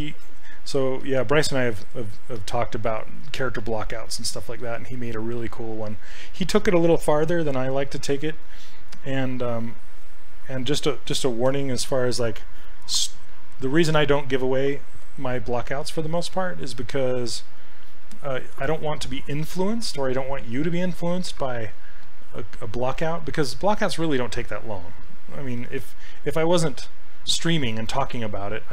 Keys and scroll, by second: 1.1 s, 4.6 s, 6.2 ctrl+z, 15.8 s, 17.1 s.